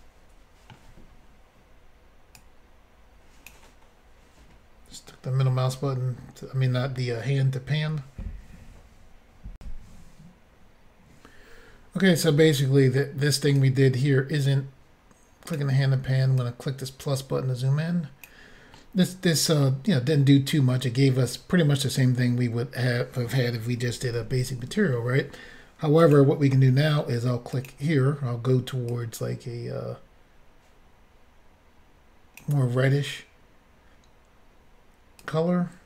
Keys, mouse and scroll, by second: 2.4 click, 9.6 Insert, 13.6 click, 16.4 click, 18.7 middle click, 19.8 scroll up 1, 20.5 scroll down 1, 24.1 f, 26.0 click, 26.1 click, 27.5 click, 27.7 click, 28.9 click, 35.2 click.